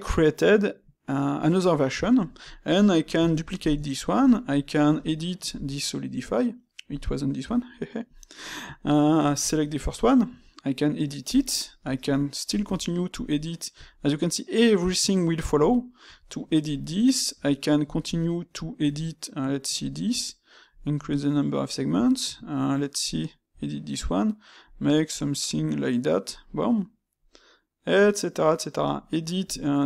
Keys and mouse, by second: 3.2 shift+d, 3.8-4.9 shift+middle drag, 4.9 space, 7.0-16.3 middle drag, 16.9-19.8 middle drag, 20.9-23.9 middle drag, 26.4-29.4 middle drag.